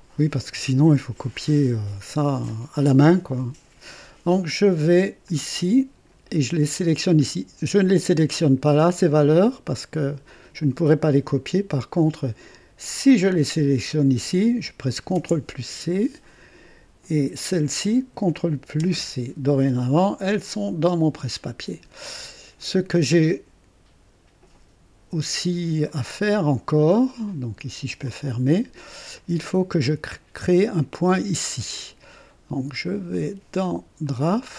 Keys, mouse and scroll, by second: 2.5 scroll down 1, 3.1-3.8 scroll down 2, 5.2-6.3 drag, 12.9 click, 15.1 ctrl+c, 17.3 click, 18.8 ctrl+c, 25.8-27.4 drag, 28.1 click, 29.2-30.0 drag, 34.2 click.